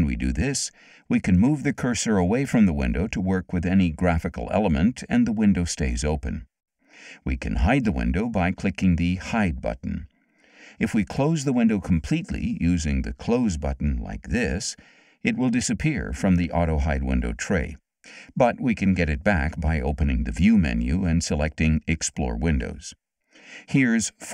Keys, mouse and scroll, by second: 1.6-5.7 drag, 9.7 click, 14.3 click, 18.0 click.